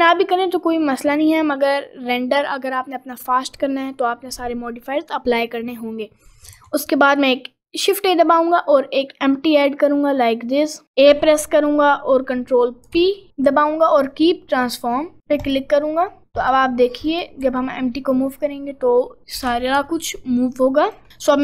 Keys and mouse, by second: 2.2 middle click, 6.6 shift+a, 11.1 a, 12.9 ctrl+p, 16.5 click, 17.1 click, 17.5 g, 19.4 g.